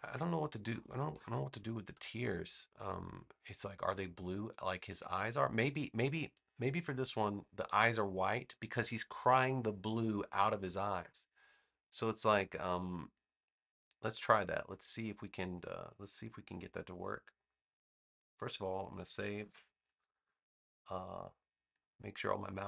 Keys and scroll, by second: 19.3 super+s.